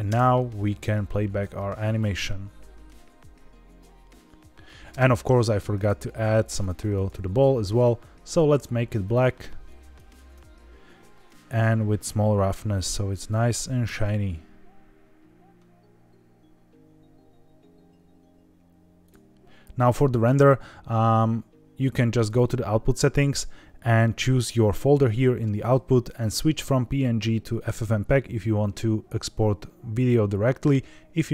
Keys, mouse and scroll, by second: 0.0 space, 4.8 space, 5.2-5.8 drag, 6.5 click, 7.7 click, 8.2 click, 8.9 click, 11.2-13.4 drag, 13.8 space, 19.0 click, 22.2 click, 23.1-23.7 scroll down 2, 26.0-31.3 drag.